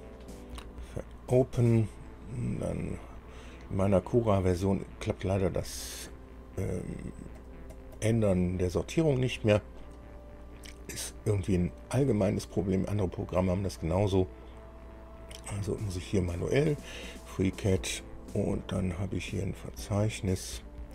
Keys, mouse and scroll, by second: 7.5 click, 9.4-10.2 scroll down 4, 11.6-12.0 scroll down 2, 15.4 click, 17.3-17.9 scroll down 2, 18.0 scroll down 2, 18.7 scroll down 2, 19.4 scroll down 2, 20.4 scroll up 2.